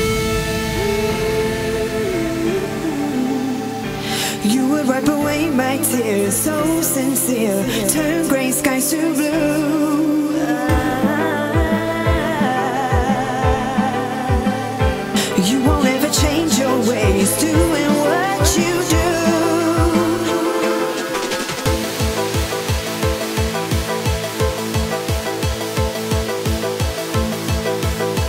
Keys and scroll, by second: 24.7 ctrl+a, 24.9 ctrl+c, 25.6 ctrl+Tab, 28.0 ctrl+v.